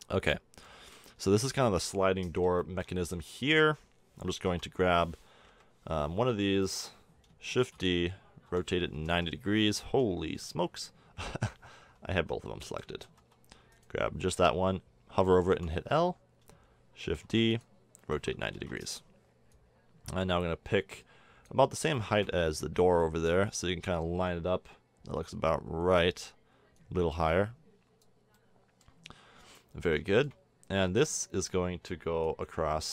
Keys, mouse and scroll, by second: 0.0 z, 3.3-4.5 middle drag, 4.5 l, 5.5 KP_1, 7.6 shift+d, 8.5 r, 12.6 ctrl+z, 13.0 ctrl+z, 13.9-15.5 drag, 15.5 l, 17.2 shift+d, 18.0 r, 19.5-20.5 drag, 21.7-23.0 middle drag, 23.0-24.6 drag, 26.8-28.9 drag.